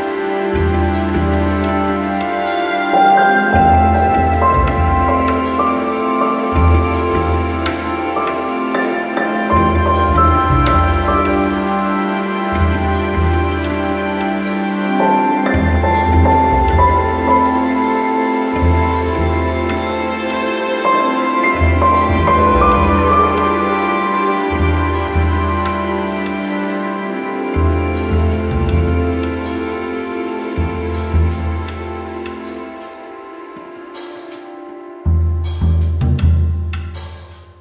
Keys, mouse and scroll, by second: 0.3 click, 0.9 click, 0.9 click, 1.9 click, 2.8 click, 3.5 alt+middle click, 4.8 click, 5.4 middle click, 5.5-6.0 scroll, 6.4 alt+middle click, 8.4 shift+click, 9.0-9.3 alt+scroll, 9.9 click, 10.9 alt+scroll, 12.1 alt+middle click, 12.5 click, 13.5 alt+middle click, 14.6 click, 15.1 alt+middle click, 17.1 click, 17.7 alt+middle click, 19.4 click, 21.0 click, 22.5 alt+middle click, 24.5 click, 25.2 alt+middle click, 28.2 click, 28.8 alt+middle click, 30.3 click, 31.2 alt+middle click, 32.4 alt+middle click, 34.4 click, 36.6 alt+scroll.